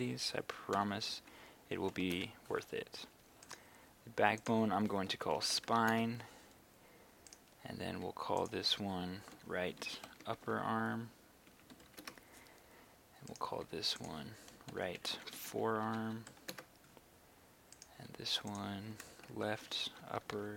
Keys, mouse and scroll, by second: 0.7-1.9 typing, 2.2 Return, 3.5 right click, 4.4 click, 5.1-5.8 typing, 5.9 Return, 7.3 right click, 8.4 click, 9.3-12.0 typing, 12.1 Return, 13.3 right click, 14.0 click, 14.7-16.3 typing, 16.5 Return, 17.8 right click, 18.5 click, 19.3-20.5 typing.